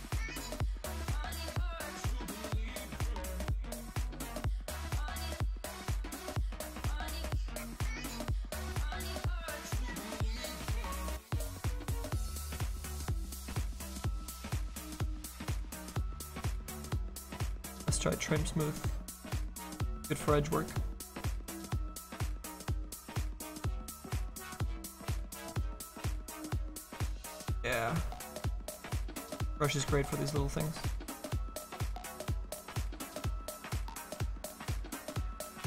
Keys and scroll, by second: 16.2 ctrl+z, 22.7 ctrl+z, 22.8 ctrl+z.